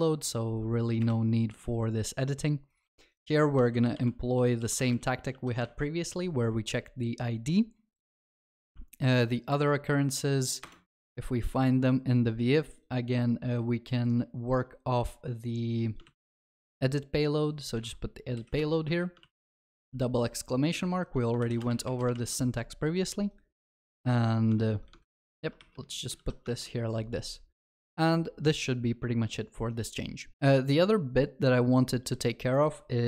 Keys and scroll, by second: 5.3 Delete, 5.3 ctrl+alt+shift+l, 5.6 ctrl+s, 16.1 ctrl+c, 22.1 ctrl+v, 22.1 ctrl+s, 26.1 ctrl+alt+shift+l, 26.5 ctrl+s.